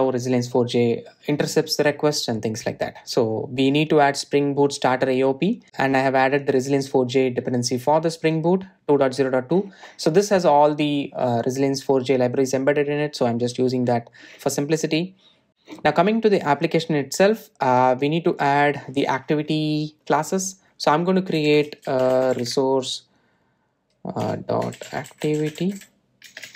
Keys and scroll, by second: 0.1 super+v.